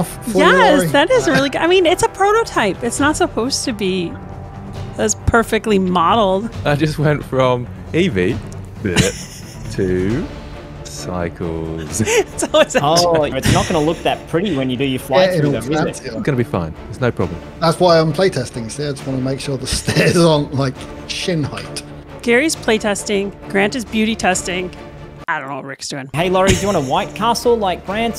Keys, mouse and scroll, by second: 7.0-12.6 drag, 22.1 Delete, 22.4 Left, 23.0 Delete, 23.5 click, 23.6 Delete, 24.4 middle click, 26.2 shift+middle click, 27.0 ctrl+z, 27.2 ctrl+z, 27.6 ctrl+z, 28.0 shift+middle click.